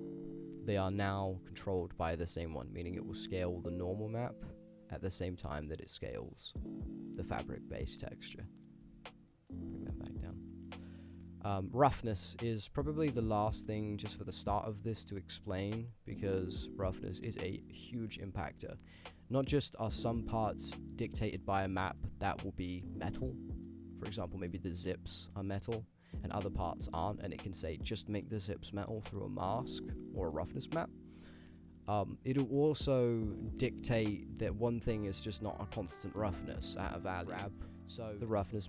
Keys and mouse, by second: 2.2-6.1 drag, 7.9-8.6 middle drag, 8.9 ctrl+z, 9.3 drag, 10.5 shift+middle drag, 10.9 ctrl+middle click, 12.0 middle click, 12.3 shift+middle drag, 12.9 ctrl+middle drag, 13.3 shift+middle drag, 13.7 ctrl+middle drag, 14.2 middle click, 15.9 click, 17.6 middle drag, 18.7-19.8 middle drag, 20.6 click, 21.3 t, 22.4 click, 22.7 click, 23.3 click, 24.5 click, 25.6 click, 27.2 click, 34.8 click, 35.4 click, 37.4 shift+middle click.